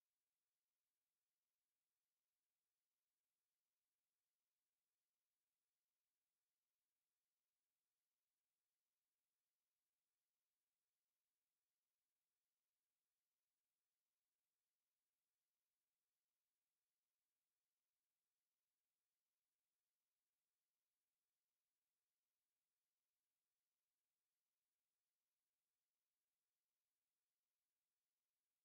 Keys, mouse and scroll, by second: 0.4 KP_1, 2.0 KP_2, 3.0 right click, 7.1-10.6 drag, 12.0 click, 14.0-16.3 right drag, 16.6-17.0 scroll down 1, 17.0-17.4 scroll up 1, 17.4 scroll down 1, 17.6 scroll up 1, 17.9-18.2 scroll down 1, 19.6 KP_1, 20.2 KP_2, 22.9 click.